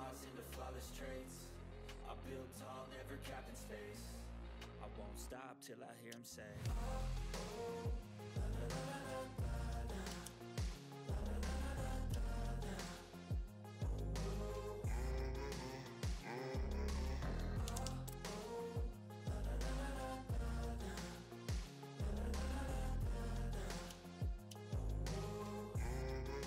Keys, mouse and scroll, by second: 4.6 typing, 5.8 ctrl+scroll up 1, 6.2 click, 10.2 ctrl+d, 10.4-11.8 drag, 10.4 typing, 12.1 ctrl+scroll down 1, 12.6 click, 13.3 right click, 13.8 click, 14.7-15.4 typing, 15.4 click, 15.4 click, 17.3 click, 17.3-19.3 typing, 19.3 Return, 19.4 scroll down 1, 19.6 scroll up 1, 19.8 click, 20.5 typing, 21.5-22.0 scroll down 1, 22.5 click, 23.4 click, 23.8 scroll down 1, 24.2 click, 25.1-25.5 ctrl+scroll up 1, 25.8 click.